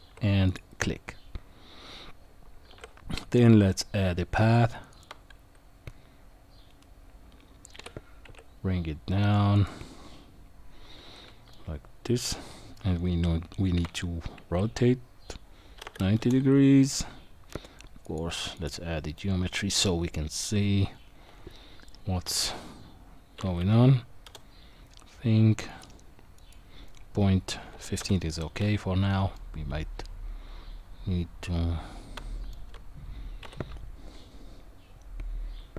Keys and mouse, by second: 2.6 shift+a, 7.8 g, 11.5-12.7 middle drag, 13.7 r, 18.0 click, 20.3-24.3 drag, 25.7 click, 26.5-28.0 drag, 29.3-32.5 middle drag, 33.4 KP_1.